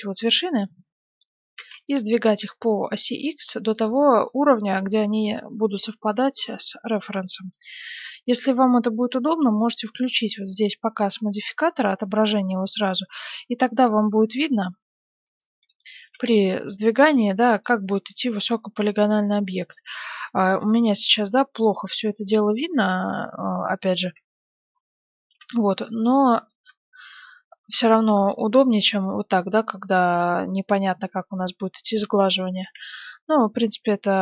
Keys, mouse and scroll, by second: 1.5 s, 4.2-6.3 middle drag, 6.7-10.6 middle drag, 11.0-12.9 drag, 13.5 a, 13.8 b, 15.2 b, 16.0 s, 18.1 middle click, 18.9 middle click, 19.8 z, 20.3-24.0 middle drag, 24.1 KP_1, 24.7 middle click, 24.7-25.3 scroll up 1, 25.3 a, 25.7 b, 26.2-28.5 middle drag, 27.2 b, 28.7-30.3 drag, 32.5 s.